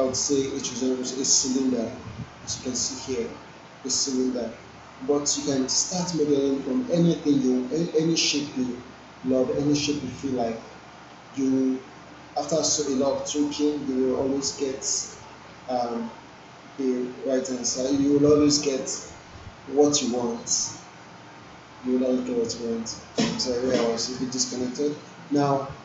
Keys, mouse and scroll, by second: 1.2 click.